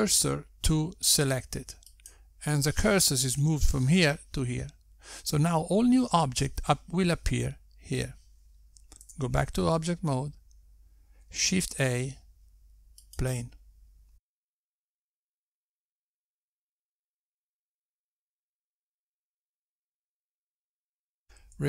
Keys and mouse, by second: 11.7 Tab, 13.8 shift+a, 14.9 Tab, 16.1 2, 16.8 click, 17.3 click, 18.6 Tab, 19.6 s, 20.3 s, 20.9 s.